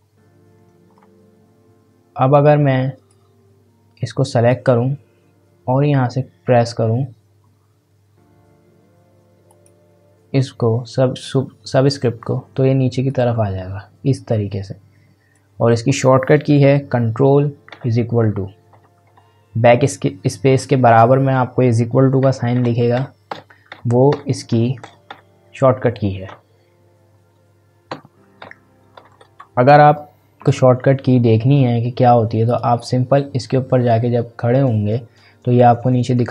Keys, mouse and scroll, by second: 0.5-0.9 scroll up 1, 3.1-6.8 drag, 9.5 click, 13.0 click, 13.1-17.7 drag, 17.7 ctrl+=, 22.2 ctrl+=, 28.4 ctrl+=, 29.0 ctrl+=, 30.5 click, 31.5-32.5 scroll down 1, 32.5 click.